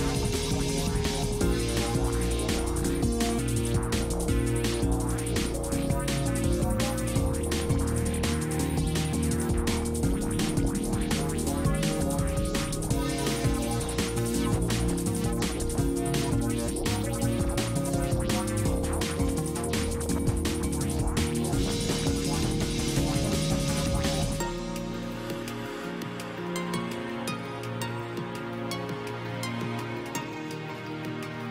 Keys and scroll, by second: 20.3 space.